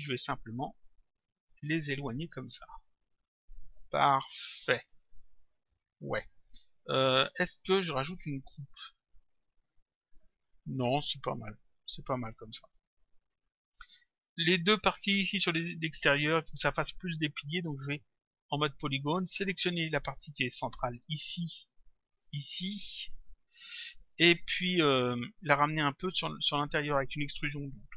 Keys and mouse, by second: 0.9 click, 17.8 click, 19.5 click, 20.7 click, 22.1 click.